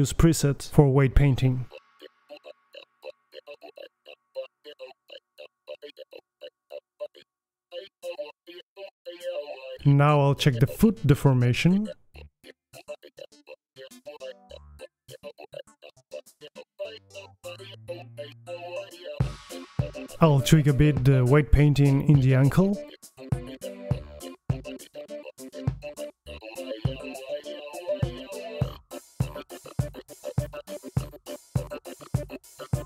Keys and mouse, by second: 0.0-0.9 drag, 1.2 KP_3, 2.9-3.3 drag, 3.3 middle click, 3.5-3.9 right drag, 3.7 g, 6.9 alt+g, 7.1 alt+r, 7.5 click, 7.8 alt+g, 7.9 alt+r, 8.0 alt+s, 8.0 a, 8.2-9.4 drag, 9.2 KP_3, 9.3 KP_3, 9.4 g, 9.7 click, 9.8 right click, 9.9 r, 10.5-10.9 drag, 10.6 alt+g, 10.6 alt+r, 11.5 click, 11.7-12.2 middle drag, 11.7 alt+r, 12.3 click, 12.4 middle click, 12.4 KP_3, 12.5 drag, 12.7 g, 13.3 right click, 13.4 alt+r, 13.4 alt+g, 13.7 right click, 13.9 right click, 14.0 r, 14.7 right drag, 14.7 g, 15.4 right click, 15.5 r, 15.6 middle click, 16.3 drag, 16.4 r, 17.3 right drag, 17.5 middle click, 17.6 click, 17.8-18.2 middle drag, 17.8 r, 18.2-18.7 drag, 18.7-19.1 middle drag, 18.9 alt+g, 19.0 alt+r, 20.1 click, 20.5 middle drag, 21.0 right click, 21.5 click, 22.2 right click, 23.2 middle drag, 23.4 click, 25.8-26.6 drag, 26.7 click, 27.4-28.2 drag, 28.2-28.7 middle drag, 28.7-29.1 right drag, 28.8 r, 29.9 middle click, 30.2-31.2 right drag, 32.1-32.7 middle drag.